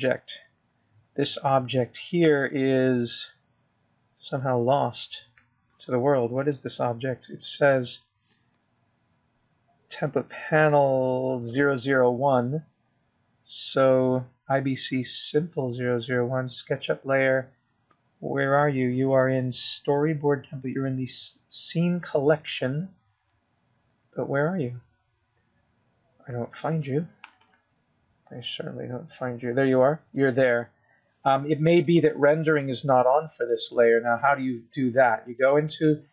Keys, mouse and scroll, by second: 0.7 middle click, 2.3 click, 4.5-4.8 scroll down 3, 4.8-5.3 scroll up 6, 5.3-6.2 scroll down 6, 6.2-6.8 scroll up 2, 6.8-8.3 scroll down 1, 8.3 scroll down 2, 12.2-13.6 scroll up 1, 13.6-15.2 scroll down 1, 17.9-18.5 scroll up 2, 18.5-19.9 scroll up 3, 19.9-21.0 scroll down 1, 25.1-26.3 scroll up 2, 27.9-31.1 scroll down 7, 31.1 KP_Decimal.